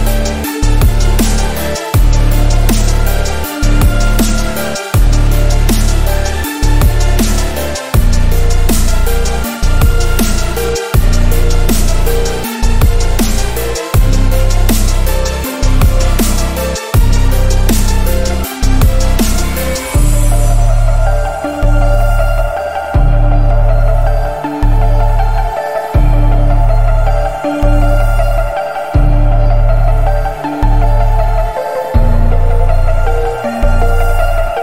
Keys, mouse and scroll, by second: 1.0-2.7 drag, 3.2 Left, 6.7 Right, 7.9 click, 8.4 ctrl+z, 8.7-9.6 click, 9.9 ctrl+t, 10.5-11.8 drag, 16.3 ctrl+t, 16.8-17.6 drag, 21.7-22.0 alt+scroll up 1, 22.3 click, 22.9 alt+scroll up 1, 23.4 click, 23.9 alt+scroll down 1, 24.0 alt+scroll up 1, 24.1 space, 24.6 alt+scroll up 1, 24.8 space, 25.0 click, 25.1 space, 25.6 click, 26.2-27.3 alt+right click, 26.8-28.2 drag, 30.2 ctrl+z, 30.5-31.7 alt+right drag, 31.7-33.2 drag, 33.0 alt+right click, 33.4 Home, 34.0-34.5 click, 34.4 space.